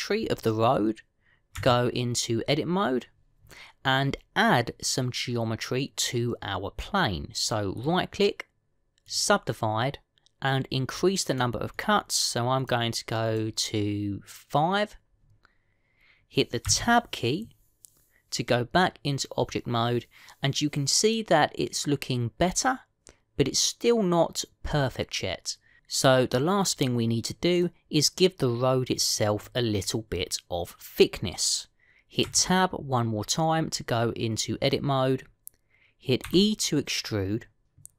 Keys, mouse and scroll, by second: 2.5 Tab, 8.7 right click, 12.1 click, 12.5 click, 13.5 click, 14.1 click, 17.5 Tab, 33.1 Tab, 37.1 e.